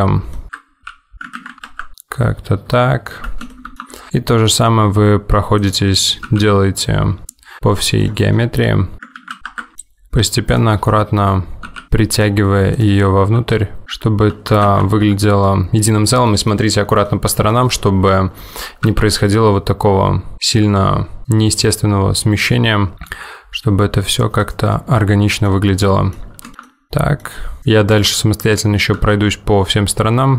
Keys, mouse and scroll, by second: 0.9 g, 1.9 middle click, 3.6 shift+middle click, 3.9 scroll down 1, 4.1 middle click, 5.6 click, 6.4 g, 9.7 middle click, 10.6 click, 11.0 middle click, 11.8 g, 11.9 middle click, 12.8 click, 13.5 g, 13.8 middle click, 14.9 ctrl+z, 15.5 middle click, 16.4 middle click, 16.6-17.2 scroll down 3, 17.2 middle click, 17.9-18.5 scroll up 3, 18.5 middle click, 19.0 g, 21.5 middle click, 23.0 click, 23.2 g, 24.8 middle click, 25.6 scroll down 1, 25.9 middle click, 26.3-26.6 scroll down 2, 26.5 shift+middle click, 26.8 middle click, 27.1 middle click, 27.5 scroll up 2, 27.7 click, 28.1 middle click, 29.2 g.